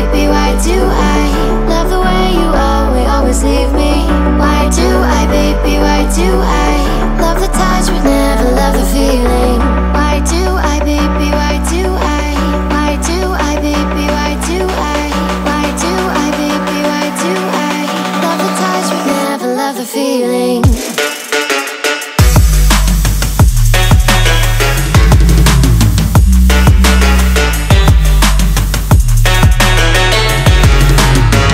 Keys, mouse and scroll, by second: 2.9-7.8 drag, 7.8 g, 10.5 click, 11.0 drag, 11.5 scroll up 1, 11.6 scroll down 1, 11.7-12.5 scroll up 3, 12.5-13.5 scroll down 2, 13.5-14.3 scroll up 1, 14.3 click, 15.9 g, 18.6 s, 20.2 g, 26.8-29.9 drag, 30.5 g.